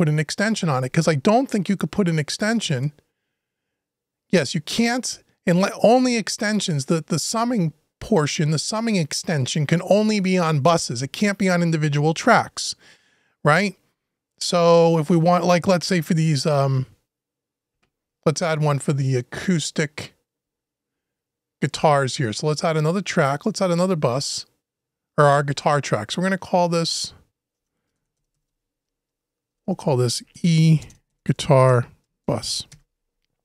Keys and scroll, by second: 27.3 BackSpace, 29.3 shift+BackSpace, 30.0 shift+BackSpace.